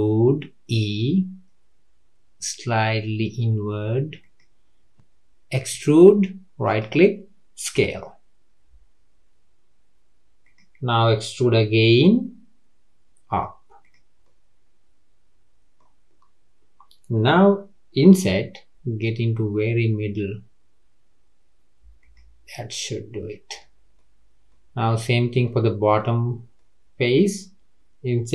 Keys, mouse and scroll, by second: 5.7 e, 7.7 s, 11.8 e, 14.2-17.3 middle drag, 22.5-24.5 middle drag, 24.5-24.8 scroll up 1, 24.8 click, 25.4 middle click, 26.2-26.5 scroll down 3, 26.5-28.3 middle drag.